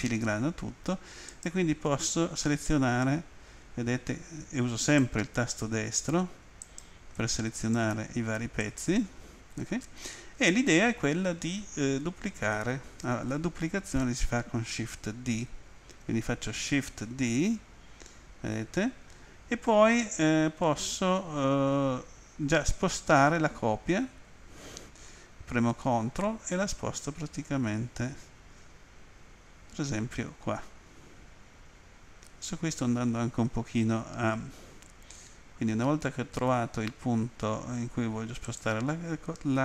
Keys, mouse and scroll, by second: 1.3 right click, 4.8 right click, 6.6 right click, 7.6 right click, 8.6 right click, 38.4 ctrl+click.